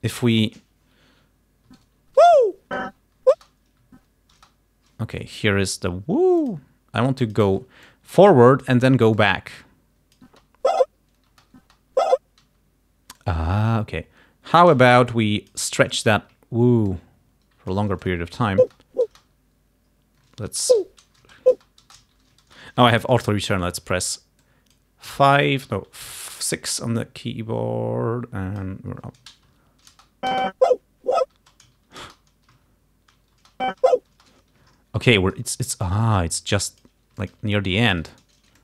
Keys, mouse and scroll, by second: 2.0 shift+Right, 2.2 shift+Left, 2.8 shift+Right, 3.4 shift+space, 4.0 shift+Right, 4.4 shift+space, 6.5 click, 7.3 click, 7.9-8.9 drag, 9.3-10.4 drag, 10.4 space, 11.4 space, 12.5 space, 13.2 click, 14.8 shift+click, 17.0-18.0 shift+drag, 18.2 shift+click, 18.7 space, 20.8 shift+Left, 21.3 shift+space, 22.1 shift+Left, 22.5 shift+space, 24.5 click, 25.1 s, 26.1 6, 26.5-28.9 drag, 29.5 shift+Left, 30.0 shift+space, 31.4 space, 31.9 shift+Left, 32.1 shift+space, 32.6 shift+Left, 33.4 shift+space, 36.2 click, 37.2 alt+click.